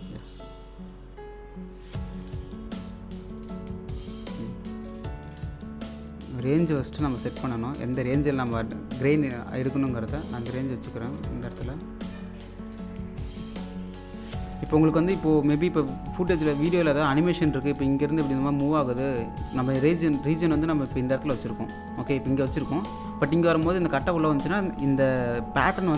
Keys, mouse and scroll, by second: 1.8 right click, 3.2 click, 6.5-10.1 drag, 10.1 scroll up 1, 10.8 click, 11.5-12.2 scroll down 1, 15.2-16.0 scroll up 1, 16.2 click, 16.4 1, 16.7 space, 17.4-20.9 alt+drag, 18.2 typing, 20.9-25.3 drag, 25.8-25.9 drag, 25.8 typing.